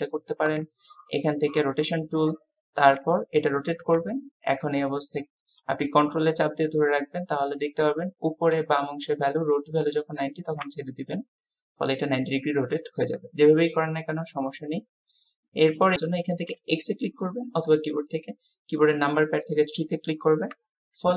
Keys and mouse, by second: 3.0-10.3 drag.